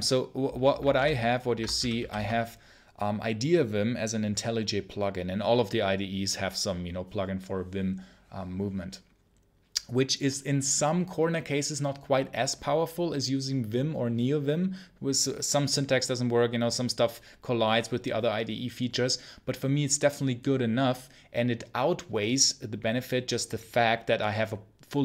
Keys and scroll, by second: 0.8 ctrl+super+l, 1.4-2.5 typing.